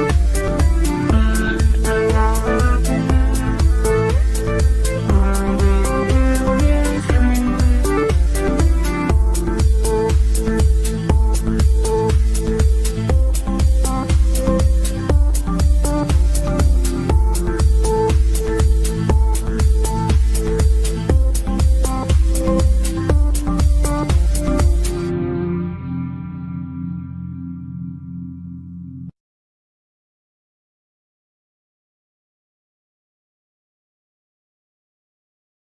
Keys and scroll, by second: 10.4 F3, 27.8 Delete, 34.6 g.